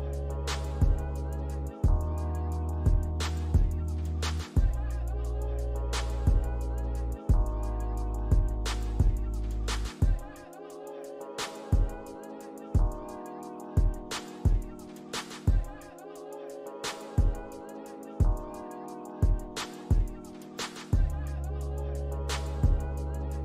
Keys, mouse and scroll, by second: 1.0 shift+click, 8.9 shift+click, 12.0 right click, 13.8 alt+middle click, 17.3 scroll up 1, 17.8-18.3 scroll down 1, 18.3 middle click, 18.9 alt+click, 19.7 alt+middle click, 20.4 alt+click, 21.2-21.5 scroll up 1, 21.7 alt+click, 22.2 scroll up 1, 22.9 alt+click.